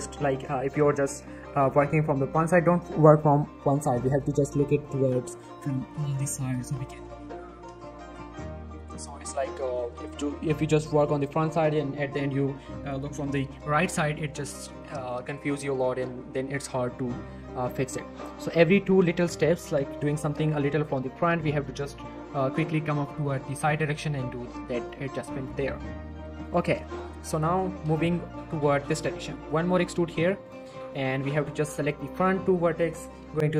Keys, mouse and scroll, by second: 0.2 click, 1.7 z, 3.9 scroll down 1, 4.0 middle click, 4.2 z, 4.8-5.6 middle click, 6.0 scroll up 1, 6.4 middle click, 9.0 scroll up 1, 9.2 click, 9.4 Tab, 9.5 z, 14.7 z, 14.8 shift+middle click, 15.0 shift+scroll up 2, 15.2 shift+middle click, 15.7-16.8 scroll up 1, 16.8 z, 16.9 scroll down 1, 17.4 z, 17.7 shift+scroll down 1, 17.8 shift+middle click, 17.9 shift+scroll up 1, 18.8 shift+middle click, 20.8 g, 21.0 right click, 23.5 g, 23.7 right click, 24.4 shift+middle click, 24.4 shift+middle click, 24.9-25.4 click, 26.0 r, 26.4 click, 26.6 g, 27.3 click, 28.9 shift+middle click, 29.1-29.5 shift+scroll up 2, 29.5 e, 29.7 z, 30.4 click, 30.5 z, 30.8-31.2 scroll down 1, 31.2 click, 31.8 shift+click, 32.0 middle click.